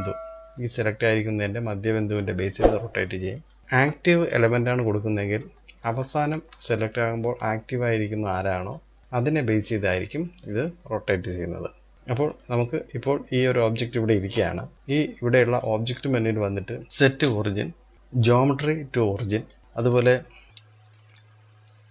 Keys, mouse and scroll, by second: 2.9-4.3 drag, 4.6-4.9 scroll down 2, 4.9-7.0 shift+middle drag, 7.0 click, 9.0 click, 10.0 click, 15.0-16.9 drag, 19.6 click, 20.7-21.9 drag.